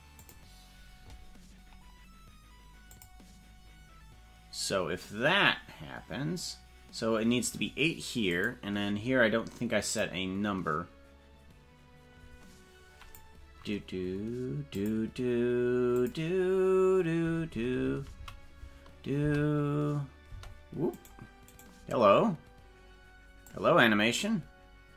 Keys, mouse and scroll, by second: 0.2 click, 3.0 click, 8.4 click, 10.0-13.4 drag, 14.8 click, 16.0 click, 17.4 Right, 17.6 Right, 17.8 Right, 18.0 Right, 18.2 Right, 19.2 space, 20.3 space, 20.9 right click, 21.5 right click, 23.4-24.9 drag.